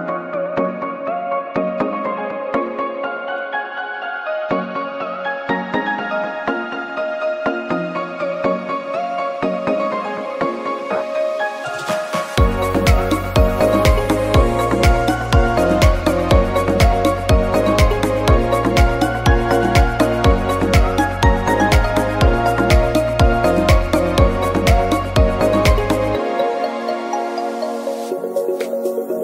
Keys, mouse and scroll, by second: 0.7 scroll down 1, 1.1 KP_7, 1.5 scroll down 1, 1.7 middle click, 2.2 click, 2.8 KP_7, 3.2 shift+middle click, 3.5 g, 8.3 click, 8.7 click, 10.1 shift+t, 11.6 middle click, 12.0-12.4 scroll down 5, 12.3 g, 13.7 KP_7, 14.8 shift+t, 15.6 middle click, 16.5 g, 17.8 click, 19.7 middle click, 20.5 KP_7, 21.2 shift+t, 22.0 middle click, 22.5 scroll up 6, 22.7 middle click, 23.3 KP_0.